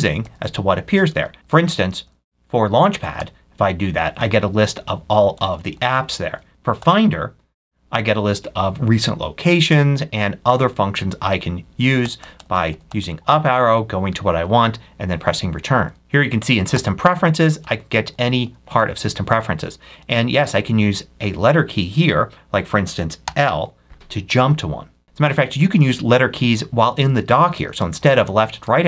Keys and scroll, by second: 1.0 Left, 3.1 Up, 5.2 Up, 6.5 Left, 6.7 Up, 11.9 Up, 16.0 Right, 16.6 Up, 19.7 Up, 23.1 i, 25.0 Left, 25.7 Left, 26.9 Left, 27.5 Left, 27.7 Right, 28.1 Left, 28.5 Right.